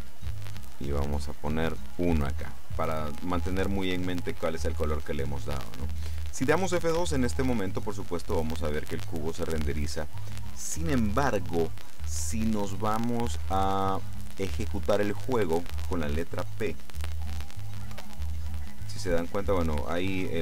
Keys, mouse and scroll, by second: 0.8-2.2 drag, 7.0 F12, 9.9 Escape, 17.9 p.